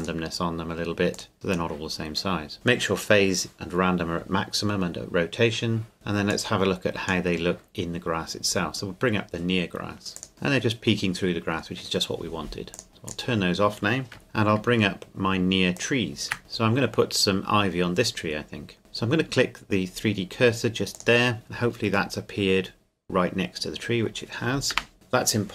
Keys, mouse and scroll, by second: 6.3 click, 10.3 click, 12.7 click, 15.8 shift+click, 22.1 middle click, 24.7 KP_0.